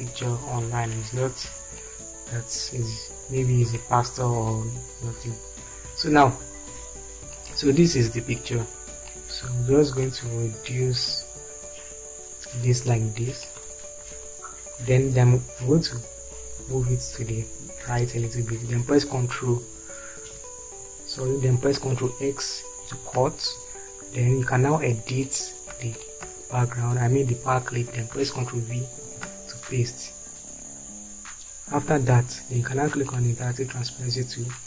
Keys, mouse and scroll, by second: 16.7 Right, 20.4 Right, 23.2 ctrl+x, 29.6 ctrl+v.